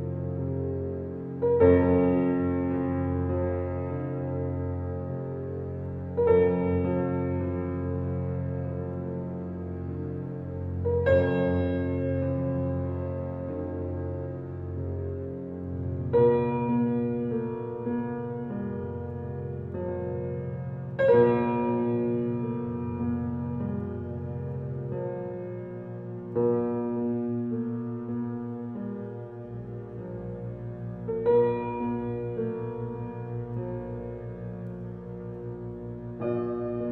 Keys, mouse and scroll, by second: 0.5 click, 2.1-3.5 drag, 8.0 click, 9.4-10.9 drag, 15.1 click, 17.6 click, 19.2 click, 24.1 click, 25.9 click, 26.6 click, 28.9 click, 29.6 click, 30.5 click, 31.2 click, 34.2-36.9 drag.